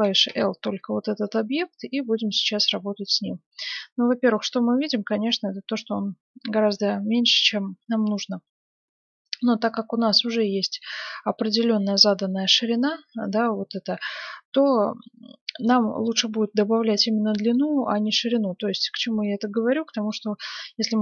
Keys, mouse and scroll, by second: 0.3 l, 0.7 scroll up 1, 0.8-1.2 scroll down 1, 1.2-3.0 middle drag, 4.4-6.1 middle drag, 10.4-12.5 middle drag, 14.0-15.8 middle drag, 17.5-21.0 middle drag, 20.7 s.